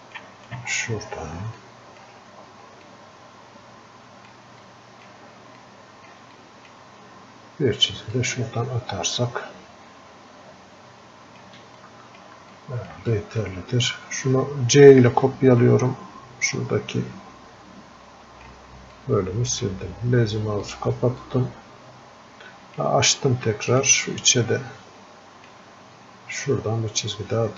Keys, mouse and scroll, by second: 6.7-12.9 drag, 12.9-27.5 alt+drag, 21.5 typing.